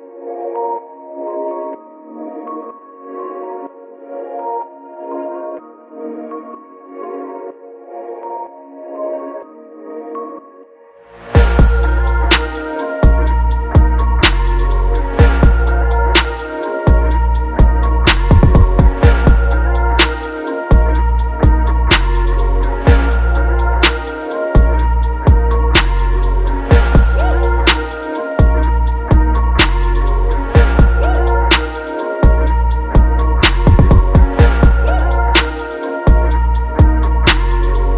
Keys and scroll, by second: 0.1 ctrl+t, 2.2 Return, 5.1 ctrl+t, 8.5 Return, 13.8 ctrl+j, 19.0 ctrl+j, 24.7 ctrl+g, 27.2 ctrl+g, 27.7 ctrl+j, 28.4 ctrl+alt+g, 32.1 ctrl+j, 35.5 Up, 36.5 Down, 36.8 Down.